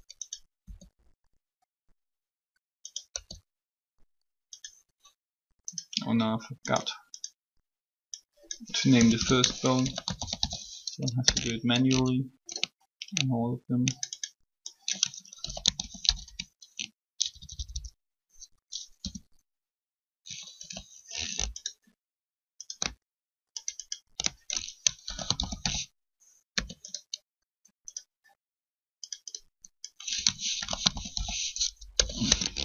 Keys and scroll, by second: 0.6 e, 3.1 e, 8.8 BackSpace, 9.0 BackSpace, 9.7 shift+t, 11.2 Return, 11.2 typing, 15.3-17.5 typing, 18.9 BackSpace, 20.5 shift+t, 24.8 typing, 26.1-26.8 typing, 30.4-32.3 typing.